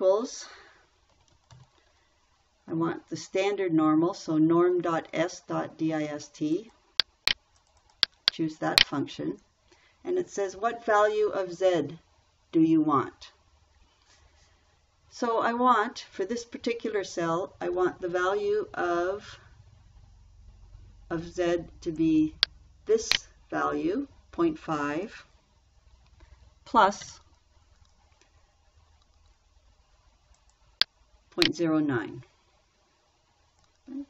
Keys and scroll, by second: 1.4-2.5 typing, 27.5 shift+=.